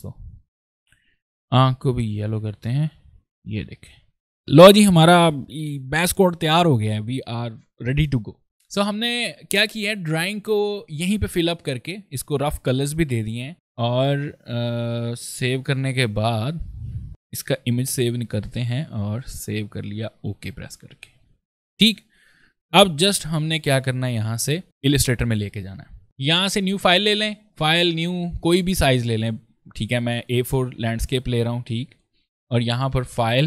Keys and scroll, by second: 13.5 ctrl+s, 16.2 ctrl+s, 17.1 ctrl+shift+s.